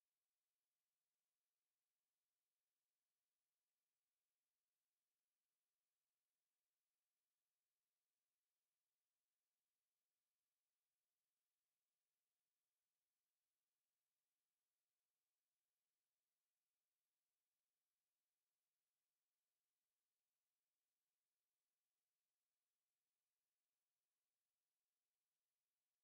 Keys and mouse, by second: 1.3 x, 3.6 b, 6.1 x, 12.1-14.8 drag, 14.8-16.6 middle drag, 18.4 b, 22.4 p, 24.1 click.